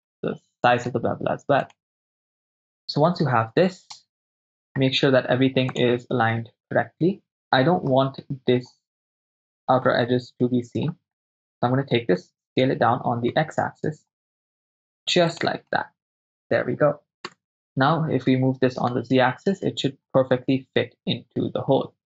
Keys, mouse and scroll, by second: 1.6 click, 3.2 KP_0, 4.0-4.7 ctrl+shift+middle drag, 5.8 click, 6.3-7.3 ctrl+middle drag, 7.3 right click, 8.0 middle click, 9.3 right click, 9.5 middle click, 9.5 click, 10.0-10.9 shift+middle drag, 11.2-12.3 right drag, 12.3 s, 12.6 y, 13.4 x, 15.4 click, 15.7-16.2 middle drag, 17.1 KP_0, 17.3 KP_0, 17.6 right click, 18.5 g, 18.9 z.